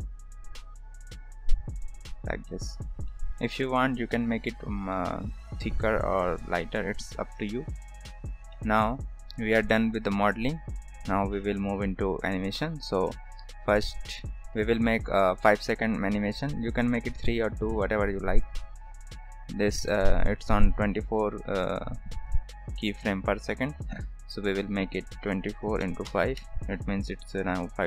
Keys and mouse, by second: 2.6 middle drag, 3.0 shift+middle drag, 4.9 shift+middle drag, 6.7-7.0 shift+middle drag, 7.7 ctrl+s, 8.5 shift+middle drag, 13.8 drag, 16.0 click, 18.0 drag, 21.9 drag, 23.0 click, 24.1 click, 24.6-26.9 drag, 27.6-27.8 drag.